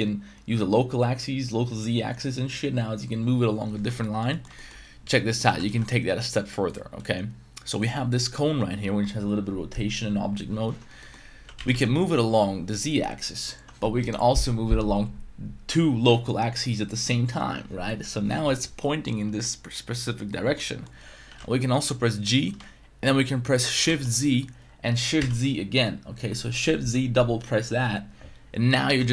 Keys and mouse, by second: 4.0 middle click, 4.3 middle click, 4.5 shift+middle drag, 5.4 r, 5.7 y, 6.7 click, 7.0-7.8 middle drag, 11.0 middle click, 11.4 g, 11.6 z, 11.7 z, 18.9-20.3 middle drag, 20.5 middle click, 21.2 g, 23.9 shift+z, 25.2 shift+z.